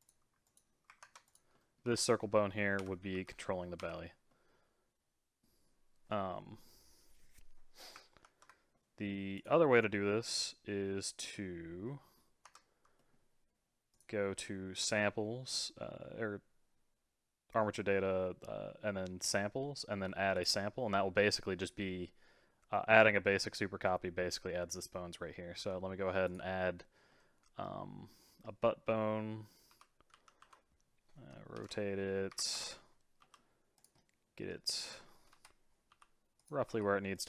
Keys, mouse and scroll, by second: 0.0 click, 0.4 click, 1.0 ctrl+Tab, 1.3 click, 1.6 middle click, 1.9 r, 3.1 g, 4.3-4.9 middle drag, 6.3-8.2 middle drag, 8.2 ctrl+Tab, 8.7 middle drag, 9.4 click, 11.9 middle click, 12.4 Tab, 13.0 middle click, 13.9 click, 20.3 click, 20.7 scroll down 3, 25.6 g, 27.1-29.7 middle drag, 29.7 r, 33.2 g, 34.0-35.3 middle drag, 35.3 KP_3, 35.9 g, 36.7 r.